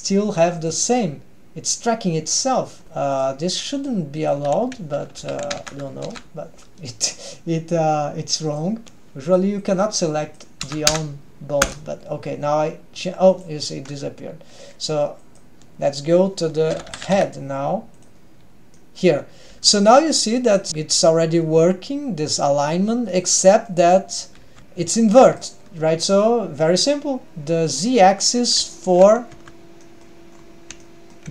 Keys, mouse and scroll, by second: 3.2 click, 3.8-8.6 drag, 9.2-11.9 drag, 10.9 BackSpace, 13.3-18.3 drag, 18.8-19.2 middle drag, 19.6 g, 20.7 middle drag, 20.8 g, 23.7 middle click, 24.4 r, 24.6 middle click, 24.6 g, 24.8 g, 27.7 click, 28.4 middle click, 28.8 shift+middle click, 29.5 Tab, 30.0-30.3 middle drag, 30.4-30.8 scroll up 2, 30.8-31.3 shift+middle drag.